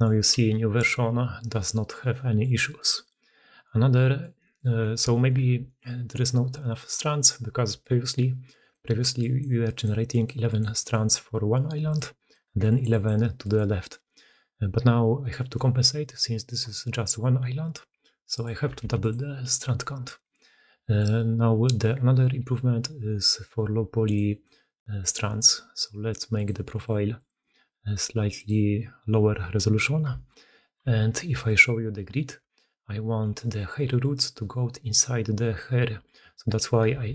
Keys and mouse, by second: 0.3 g, 1.9-2.6 middle drag, 3.4-4.4 middle drag, 4.6 middle drag, 5.0 shift+middle drag, 5.5 middle click, 7.6-13.7 typing, 7.6 click, 9.0 click, 10.6 click, 11.8 click, 12.5 click, 12.7 click, 13.3 click, 13.8-15.4 drag, 15.4-18.5 middle drag, 15.4 d, 15.5 d, 18.7 2, 18.9-20.0 middle drag, 20.8-24.0 middle drag, 26.8-27.1 middle drag, 28.3-29.7 drag, 29.7 shift+middle drag, 30.0 shift+drag, 30.2-31.9 middle drag, 30.7 h, 31.9 click, 32.2-33.1 middle drag, 32.3 Tab, 33.1 click, 33.2 middle click, 33.5-37.1 typing.